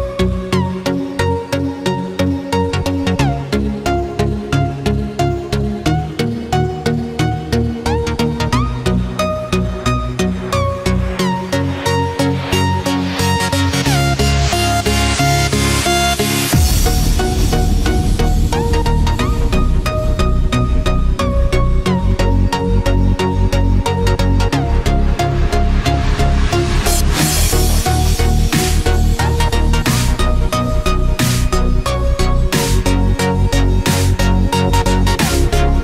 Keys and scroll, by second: 0.2 ctrl+f, 0.8 ctrl+d, 7.6 ctrl+f, 8.1 ctrl+d, 16.5 ctrl+f, 17.4 ctrl+d, 18.5 ctrl+-, 18.7 ctrl+space, 27.7 ctrl+=.